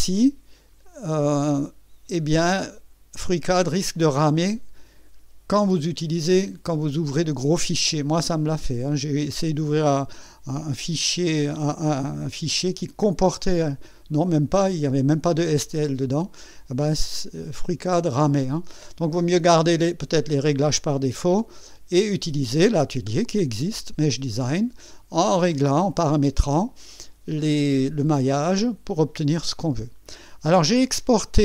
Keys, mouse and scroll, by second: 0.0 click, 1.3 click, 3.9 click.